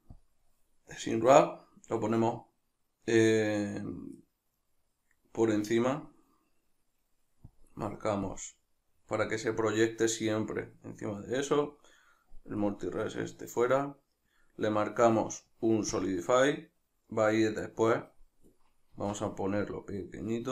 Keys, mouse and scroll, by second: 1.0-6.0 middle drag, 6.0 click, 6.6-7.6 middle drag, 7.6 click, 9.1-12.6 middle drag, 12.6-16.8 drag, 16.8-19.0 middle drag, 19.0-20.5 shift+drag.